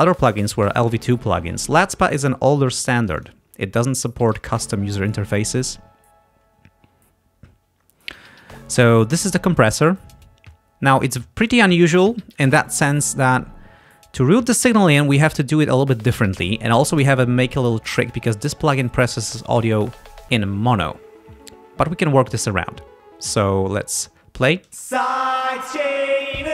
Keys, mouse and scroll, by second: 3.1 click, 4.4 click, 10.0-11.8 drag, 24.7 space.